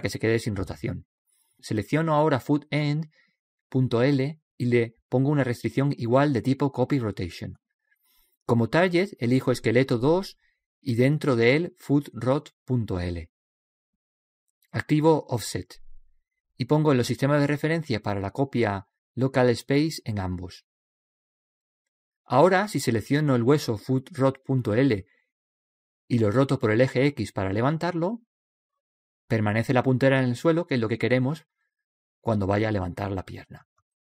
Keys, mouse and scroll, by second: 0.3 ctrl+z, 3.1-4.9 right drag, 5.6-7.4 drag, 10.3-12.2 drag, 12.3 click, 13.4 o, 16.9-19.7 drag, 20.2-22.1 drag, 22.6 middle click, 23.3-24.4 middle drag, 24.3-26.2 right drag, 26.3-28.2 drag.